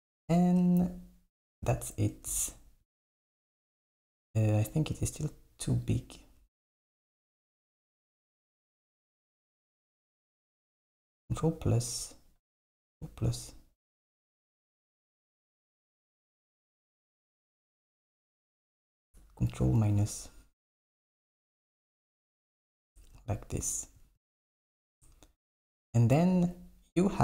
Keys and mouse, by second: 0.7 Tab, 3.7-4.7 drag, 5.3 shift+click, 5.9 shift+click, 6.2 shift+click, 8.2 shift+click, 8.7 shift+click, 11.0 ctrl+KP_Add, 12.8 KP_Add, 18.1 click, 18.8 click, 19.8 ctrl+KP_Subtract, 20.8 g, 23.0 Tab, 24.4 s.